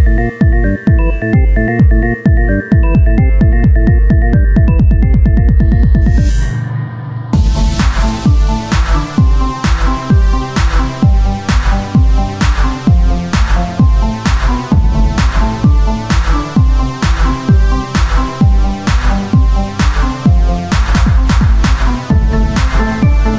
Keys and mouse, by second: 1.5 e, 3.1 click, 3.9 click, 4.1-5.3 right drag, 5.3 click, 6.7-8.5 right drag, 7.4 e, 9.0-12.0 drag, 10.1-13.1 right drag, 13.1 e, 15.4-16.6 drag, 16.6 ctrl+z, 19.1-21.8 drag, 21.8 Tab, 22.9 click, 23.2 Tab.